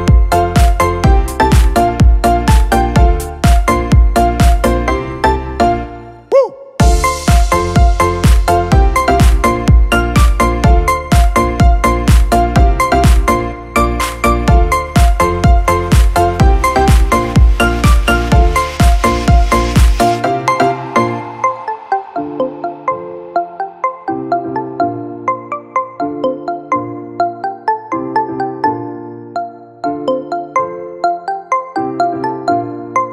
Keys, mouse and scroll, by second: 0.5 shift+Down, 0.8 shift+Down, 1.0 shift+Down, 2.1 shift+click, 4.2 shift+Down, 4.6 shift+Down, 4.8 shift+Down, 5.0 shift+Down, 5.5 shift+Down, 6.9 shift+Left, 12.4 shift+click, 24.3 shift+click.